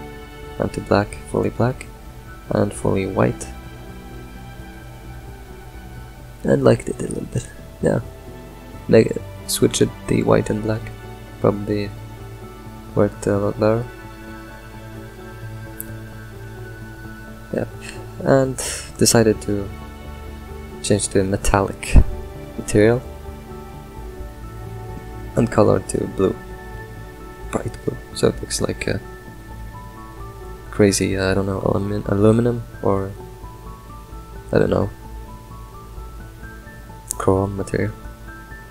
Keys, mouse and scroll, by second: 0.9 middle click, 1.5 click, 4.9-6.3 middle drag, 6.3 scroll down 2, 6.8-8.5 drag, 10.8-16.0 middle drag, 16.0 scroll down 2, 16.2-17.3 middle drag, 17.3 drag, 18.0 click, 18.9 middle click, 19.2-19.7 scroll up 5, 20.7-22.9 drag, 24.2 click, 27.0-32.6 middle drag, 32.6-33.0 scroll down 2, 33.2-38.7 middle drag.